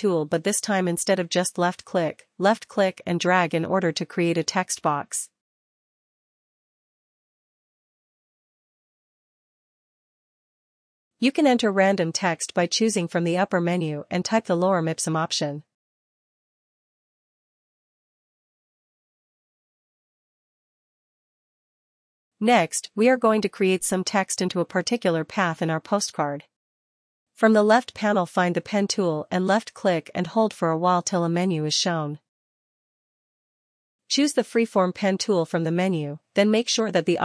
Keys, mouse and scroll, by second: 8.1-11.3 drag, 18.6 click, 18.6 click, 20.2 click, 22.8 click, 29.8 click, 31.3 click, 33.5 click, 36.2 click.